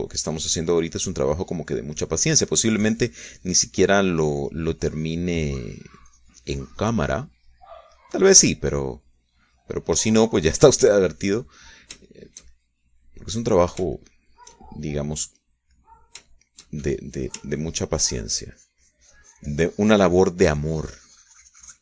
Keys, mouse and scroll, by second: 2.2-4.1 drag, 4.1 middle click, 4.3-5.7 drag, 5.7 middle click, 5.9-7.4 drag, 7.4 middle click, 7.6-9.3 drag, 9.4-12.0 drag, 12.2-13.4 drag, 13.4-15.0 shift+middle drag, 15.4 shift+middle click, 16.2 shift+middle click, 17.2 middle click, 17.8 shift+middle click, 18.8-21.8 ctrl+drag.